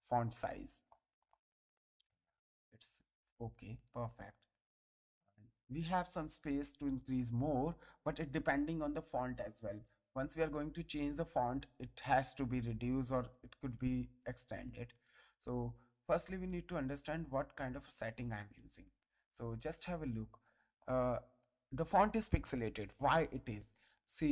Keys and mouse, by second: 2.2 click, 3.8 ctrl+click, 5.2 click, 5.6 ctrl+a, 6.8 click, 10.5 click, 12.1 ctrl+click, 14.9 click, 15.4 ctrl+a, 16.2 ctrl+space, 16.4 ctrl+click, 18.5 ctrl+click, 19.7 click.